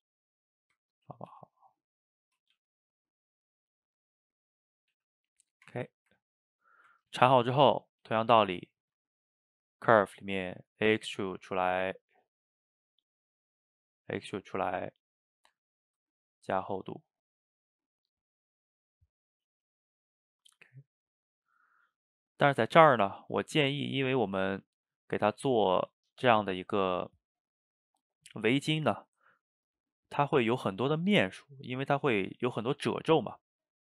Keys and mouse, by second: 1.2 click, 1.3 g, 2.4 click, 2.6 g, 4.1-4.8 middle drag, 4.8 click, 5.0 g, 5.4 middle drag, 5.7 Tab, 6.1-8.2 ctrl+middle drag, 8.2 shift+right click, 8.4-9.5 ctrl+shift+middle drag, 9.5 drag, 10.4 middle click, 11.2-12.1 drag, 12.4-15.4 drag, 16.3-19.4 shift+drag, 24.0-27.0 middle drag, 31.9-33.8 middle drag.